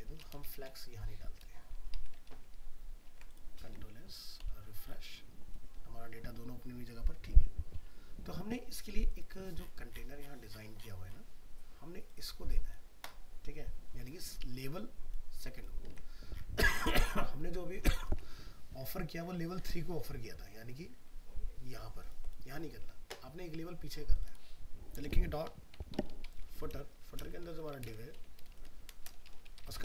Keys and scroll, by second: 2.3 ctrl+s, 3.7 alt+Tab, 15.9 alt+Tab.